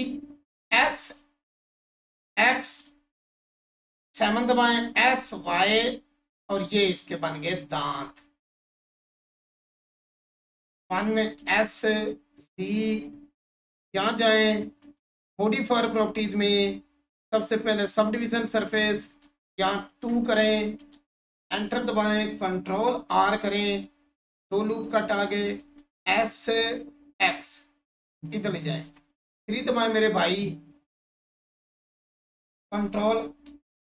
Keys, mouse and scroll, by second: 2.5 click, 3.7 7, 7.3 click, 8.2-8.6 scroll up 1, 9.1-10.8 alt+drag, 10.8 1, 12.5 click, 17.8 click, 19.3 2, 19.9 Return, 21.4 Tab, 23.8-24.7 scroll up 1, 24.7 click, 28.1 click, 28.8 3, 31.7-32.2 scroll up 1.